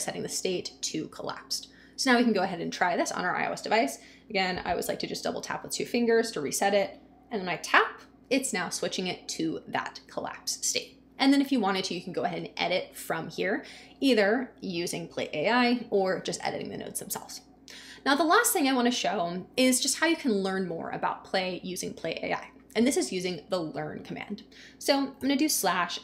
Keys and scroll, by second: 25.2 /.